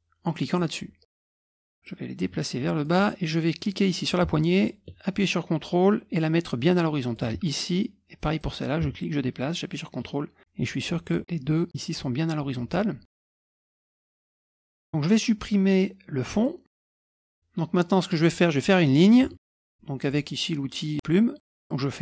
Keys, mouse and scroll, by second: 0.5-1.7 drag, 1.8-2.9 ctrl+drag, 3.7-7.3 drag, 8.4-11.2 drag, 13.1 click, 13.5 click, 13.6 click, 13.9 click, 14.1 click, 14.4 click, 14.6 click, 16.3 click, 19.4 ctrl+scroll down 2, 19.7 ctrl+middle click, 21.4 click.